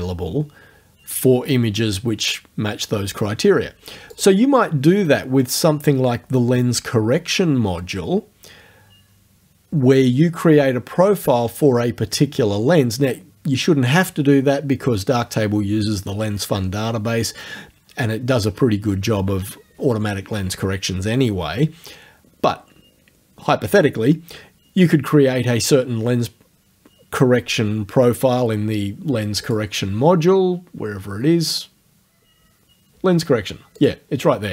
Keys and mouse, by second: 4.2 click, 29.5 click, 33.8 click.